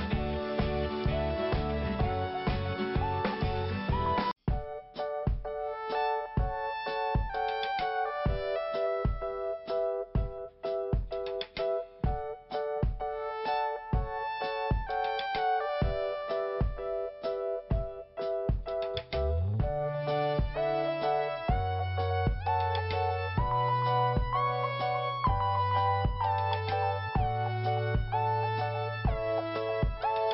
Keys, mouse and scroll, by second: 0.5 click, 0.6 click, 0.8 scroll up 2, 2.0 click, 3.4 click, 3.5 click, 3.7 scroll up 2, 4.5 click, 6.2 click, 7.2 click, 10.3 click, 10.4 click, 11.2 click, 13.4 click, 19.6 click, 24.8 click, 27.2 click, 28.6 click, 30.0 scroll down 2.